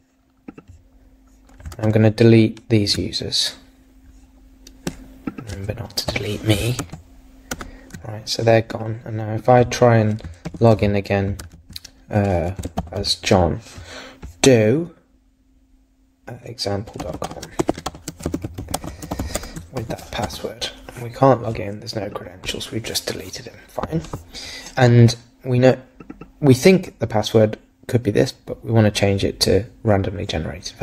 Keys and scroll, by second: 1.8 super+Tab, 6.8 super+s, 7.5 super+Tab, 10.5 super+v, 11.4 super+z.